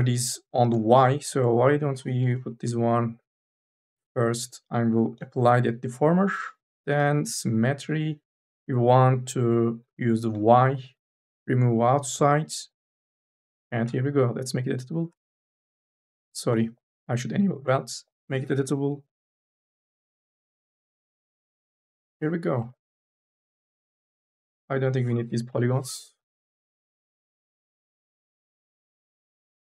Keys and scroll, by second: 2.0 4, 13.7 c, 16.7 ctrl+z, 17.5 c, 21.5 Delete, 22.9 3, 23.8 space, 25.3 Delete, 26.2 1, 28.9 4.